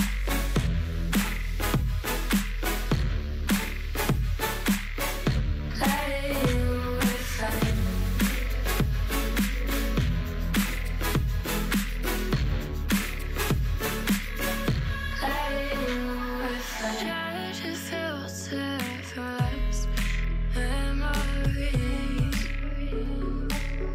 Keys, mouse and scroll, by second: 1.4 ctrl+l, 1.9 s, 2.8 g, 3.5 s, 4.3 g, 5.5 click, 6.4 g, 7.9 e, 8.6 s, 9.5 g, 10.7 s, 12.2 g, 14.1 e, 14.7 g, 15.5 e, 16.2 s, 17.4 g, 18.7 e, 19.5 e, 20.2 ctrl+shift+z, 21.3 g, 21.7 ctrl+z, 22.0 ctrl+z, 22.9 s.